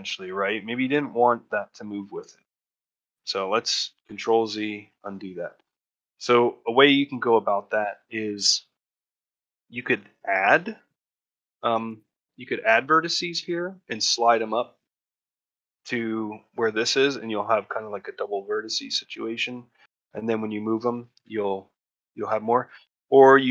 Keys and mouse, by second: 4.8 middle click, 9.7 ctrl+middle click, 10.2 middle click, 10.7 shift+middle click, 20.9 ctrl+shift+middle click, 22.0 shift+middle click.